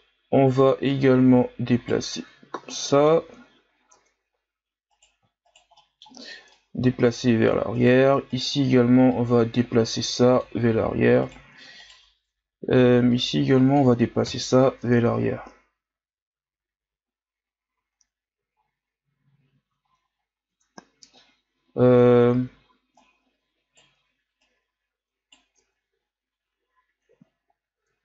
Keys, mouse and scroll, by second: 1.0 right click, 2.1 Tab, 2.8 middle click, 3.4-4.0 ctrl+scroll up 2, 4.0 Tab, 4.9 right click, 5.4 shift+right click, 5.8 middle click, 6.6-7.8 drag, 7.8 right click, 8.3 shift+right click, 9.1-11.2 drag, 11.2 right click, 11.8 shift+right click, 12.4-12.8 ctrl+scroll up 4, 13.1-14.3 drag, 14.3 KP_1, 14.8 Tab, 15.3-15.9 scroll down 1, 17.7 a, 18.0-19.2 scroll down 10, 19.2-20.5 scroll up 8, 20.5 Tab, 23.0 right click, 24.4 right click, 25.6 Tab, 26.0-26.6 scroll down 4, 27.3-27.8 scroll up 4, 27.8 Tab.